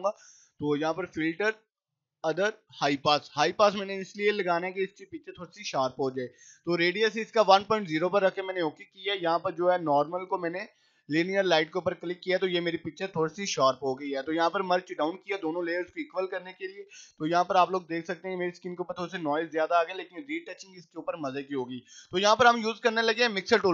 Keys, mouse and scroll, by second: 8.2 click, 11.8 click, 12.9 right click, 14.7 click, 16.6 click, 17.7 right click, 18.5 click, 22.2 click.